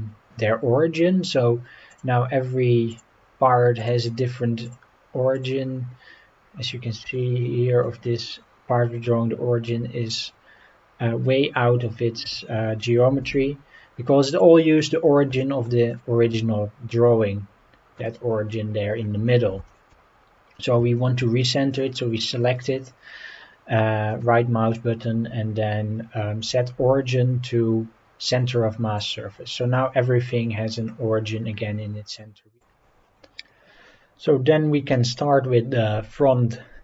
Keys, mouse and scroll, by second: 1.9 click, 2.9 click, 3.8 click, 4.6 click, 5.3 click, 7.0 g, 7.8 click, 14.3-14.8 drag, 14.8-15.3 scroll down 4, 15.4 shift+middle drag, 15.9 click, 16.2-16.8 scroll up 4, 18.0-18.4 scroll up 3, 19.0-19.5 scroll down 4, 19.7 shift+middle click, 20.1 scroll up 3, 20.4-20.8 scroll down 2, 20.9 shift+middle drag, 21.7-22.2 drag, 23.3 scroll up 3, 24.1-29.1 right drag.